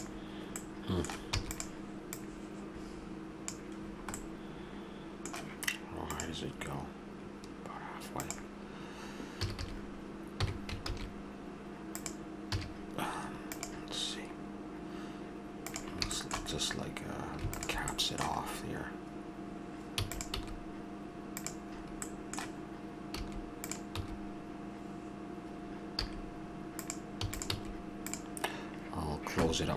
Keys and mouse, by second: 1.3 e, 3.8 middle click, 4.5 middle click, 9.4 a, 9.6 a, 10.4 s, 12.5 a, 15.7 a, 16.1 middle click, 17.5-19.4 middle drag, 19.9 e, 20.3 s, 23.2 s, 23.9 e, 27.2 e, 27.5 s.